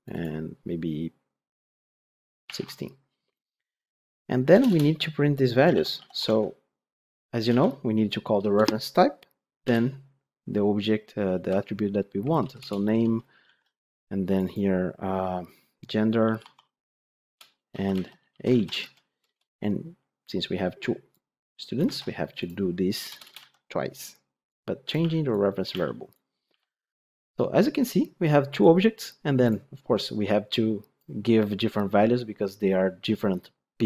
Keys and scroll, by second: 6.2 Tab, 8.3 Return, 12.5 Return, 12.9 ctrl+d, 17.1 Return, 18.5 ctrl+shift+Left, 19.1 Return, 21.7 ctrl+c.